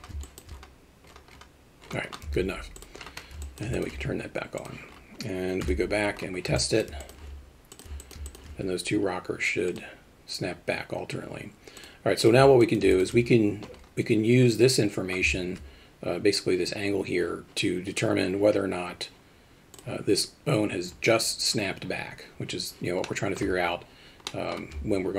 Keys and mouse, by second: 0.3 alt+shift+middle click, 3.6 alt+middle click, 3.8 alt+shift+middle click, 5.7 KP_Divide, 6.6 alt+middle drag, 7.1 alt+shift+middle click, 7.8 drag, 8.1 alt+middle drag, 8.3 alt+shift+middle click, 9.8 click, 12.7 alt+middle click, 13.0 alt+shift+middle click, 23.1 middle click, 24.3 alt+shift+middle drag.